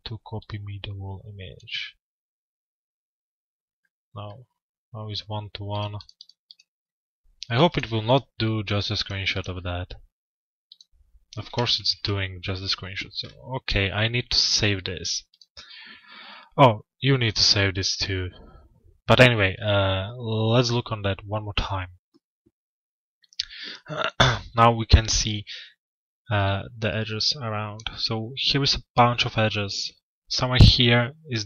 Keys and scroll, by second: 11.4 ctrl+v.